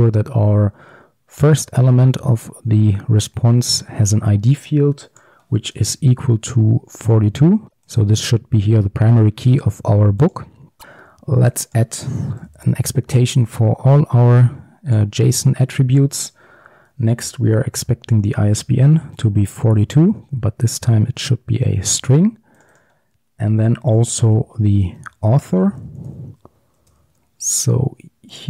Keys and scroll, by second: 10.8 ctrl+d, 21.7 ctrl+d.